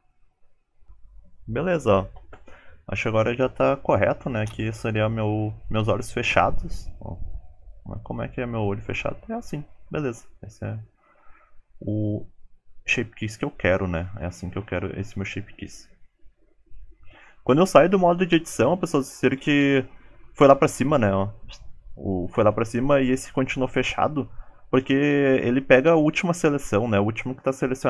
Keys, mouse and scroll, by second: 0.0 g, 0.1-0.6 scroll down 9, 0.1 alt+z, 0.2 middle click, 0.3 click, 0.4 middle click, 0.8 Tab, 0.8 shift+middle click.